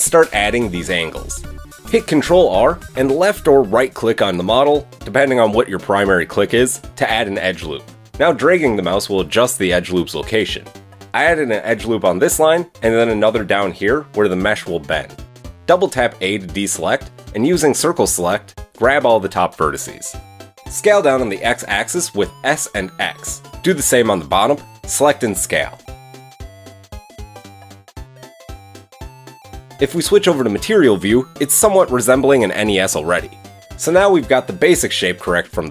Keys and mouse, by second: 1.9 ctrl+r, 13.0 ctrl+r, 16.8 a, 17.0 a, 17.2 c, 20.5 s, 22.9 a, 23.0 a, 23.3 c, 25.5 s, 28.9 a, 31.6 middle click, 32.8 middle click, 33.7 KP_1.